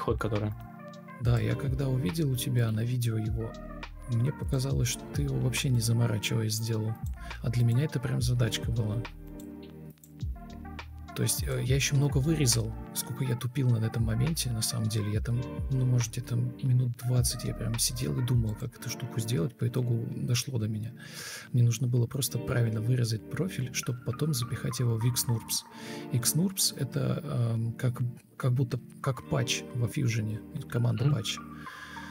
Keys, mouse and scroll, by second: 3.0 Left, 3.2 Left, 7.5 Delete, 23.3 alt+shift+c, 24.7 Escape, 25.1 Escape, 26.9 Delete, 32.0 Delete.